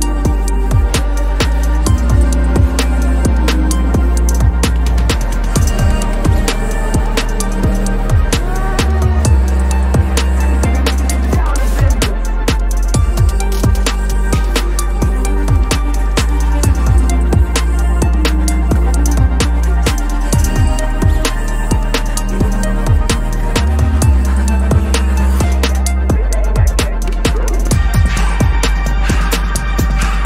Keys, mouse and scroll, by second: 0.0 ctrl+=, 0.3 space, 1.0 ctrl+=, 1.5 p, 3.5 double click, 4.1 space, 4.1 double click, 4.9 double click, 5.2 right click, 6.0 Return, 6.4 ctrl+-, 6.6 ctrl+-, 6.7 ctrl+-, 6.9 ctrl+-, 7.0 ctrl+-, 7.5 ctrl+click, 10.7 alt+click, 12.3 double click, 13.4 typing, 14.0 double click, 17.6 typing, 25.4 double click, 26.2 typing, 27.5 double click, 28.2 typing, 29.4 ctrl+-, 29.6 ctrl+-.